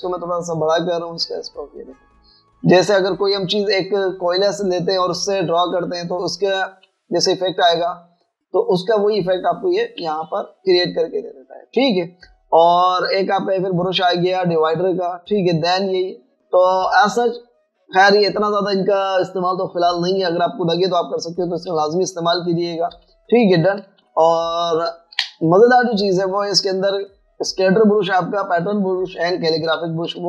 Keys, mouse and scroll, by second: 0.4 typing, 2.0 scroll up 1, 2.8-4.5 typing, 3.4 scroll down 1, 4.2 scroll up 1, 4.5 Return, 7.9 typing, 11.0 typing, 12.8 click, 23.1-24.0 typing, 25.3 click, 26.2 click.